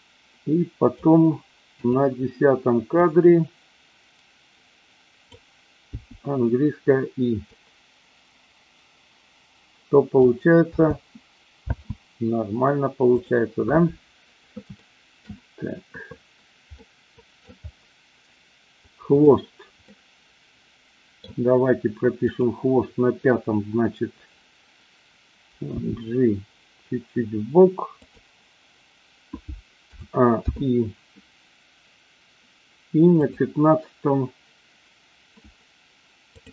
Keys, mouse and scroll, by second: 1.8 click, 3.1-5.5 drag, 5.9 i, 7.5-10.1 drag, 10.7 space, 11.6 space, 13.1 click, 14.8 shift+middle click, 16.8-17.5 middle drag, 19.0-19.7 drag, 19.8-21.2 middle drag, 22.4 click, 25.6 g, 28.0 click, 29.9 a, 30.5 i, 33.2 click.